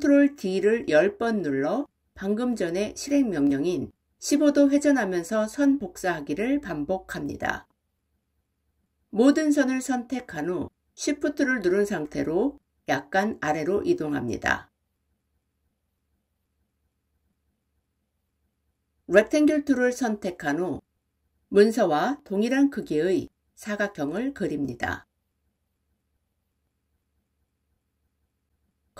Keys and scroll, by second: 9.1 ctrl+a.